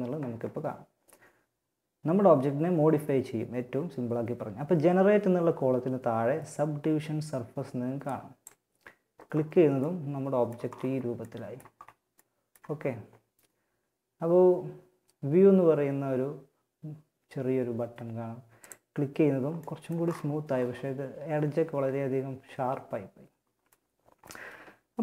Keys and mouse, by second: 9.1-11.7 middle drag, 17.7-18.8 drag, 18.8 middle click.